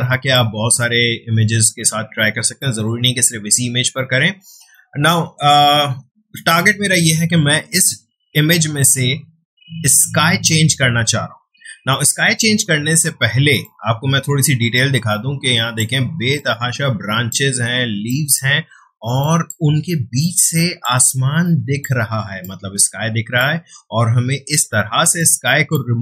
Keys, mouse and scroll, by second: 13.1 space, 13.6-26.0 ctrl+drag.